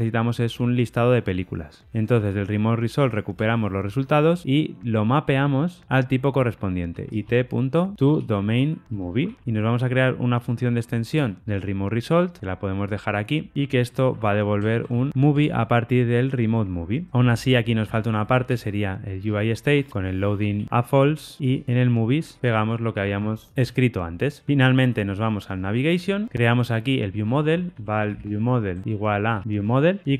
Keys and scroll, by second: 4.6 Return, 5.4 Return, 11.4 alt+Return, 15.3 Tab, 17.8 super+x, 19.2 super+x, 20.2 Return, 22.2 super+v, 29.7 Return.